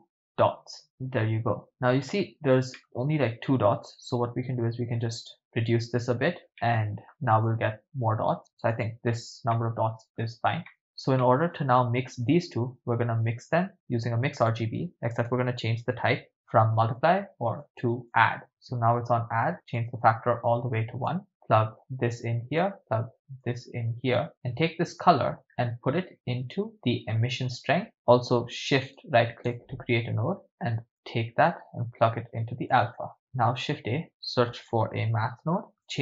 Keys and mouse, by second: 1.6 shift+middle click, 2.8 middle click, 3.9 click, 6.6 ctrl+middle click, 7.5 click, 9.6 middle click, 10.7 middle click, 11.2 middle click, 12.0-13.5 drag, 14.1 shift+a, 18.0 click, 19.8-21.2 drag, 21.8 click, 23.4-24.2 drag, 25.0-27.6 drag, 29.0-29.6 shift+drag, 29.0 shift+right click, 30.4 middle click, 30.4 click, 31.0 click, 33.2 shift+a.